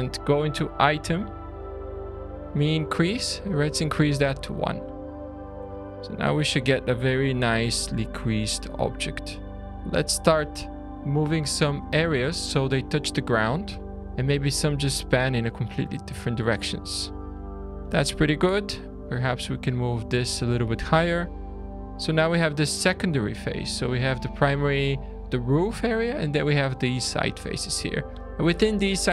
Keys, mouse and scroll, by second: 0.3 click, 3.1 click, 5.2-5.7 scroll up 3, 5.7 shift+middle click, 8.9 alt+a, 9.6 middle click, 9.6 click, 9.6-10.1 scroll down 2, 11.4 click, 12.6 click, 14.0 shift+click, 15.3-15.8 scroll down 2, 16.2 shift+middle click, 17.3 middle click, 17.9 alt+a, 18.2 1, 18.5 click, 19.3 click, 20.8 scroll down 2, 21.2 shift+middle click, 24.5 scroll up 3, 27.2 middle click.